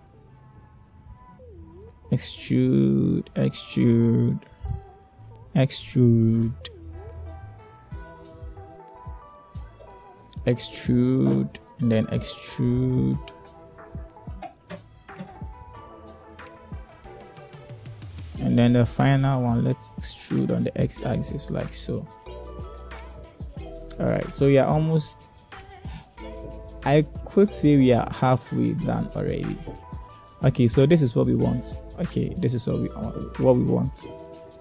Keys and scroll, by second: 3.4 e, 6.7 e, 11.4 e, 14.5 e, 20.6 e, 25.2 Tab, 29.6 h, 31.2 1.